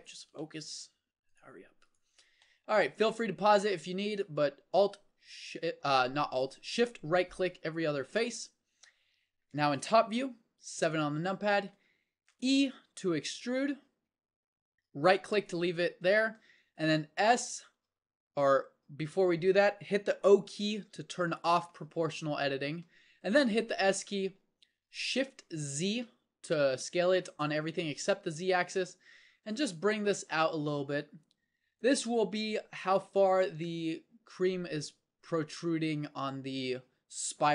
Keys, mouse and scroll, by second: 4.2-10.6 drag, 10.6 KP_7, 11.4-13.8 middle drag, 13.8 e, 18.5 s, 20.8 o, 23.8 s.